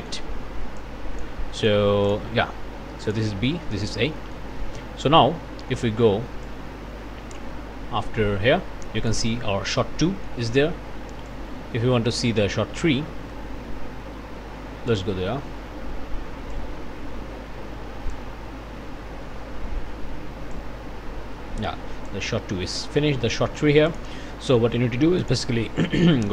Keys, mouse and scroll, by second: 0.8 click, 1.5 click, 2.1 click, 3.1 click, 3.5 click, 4.2 click, 6.4-9.3 drag, 10.0 click, 11.3-15.1 drag, 16.5-18.3 drag, 20.5-22.3 drag, 22.6 click, 23.4 click, 23.9 click, 24.5 click, 25.2 click.